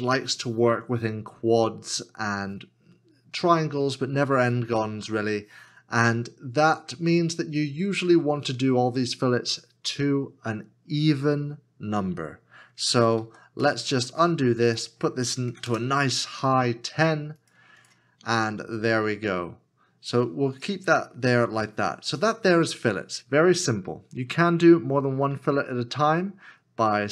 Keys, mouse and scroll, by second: 13.6 ctrl+z, 15.6 KP_1, 23.9-25.3 scroll down 1.